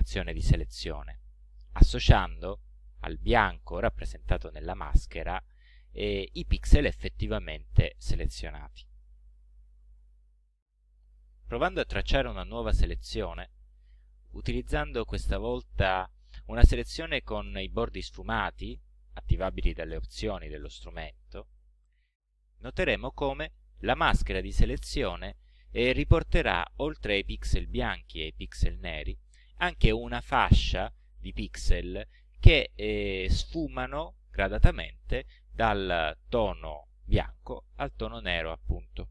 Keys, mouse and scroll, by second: 11.8 click, 13.3 click, 16.7-18.5 drag, 26.9-28.4 drag.